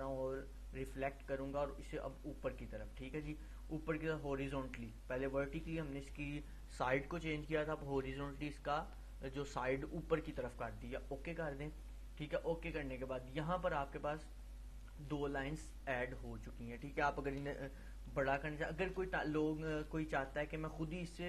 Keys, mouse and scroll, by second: 0.9 click, 11.4-14.2 drag.